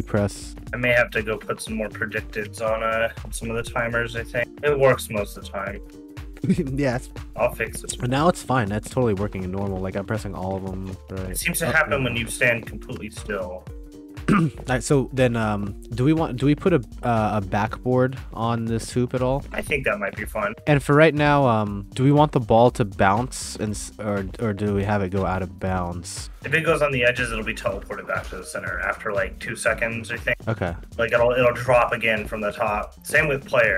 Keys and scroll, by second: 4.2 w, 7.1 w, 8.4 a, 9.3 d, 11.1 a, 14.4 w, 14.7 d, 16.5 space, 18.8-22.4 typing, 29.7 d, 31.3 d.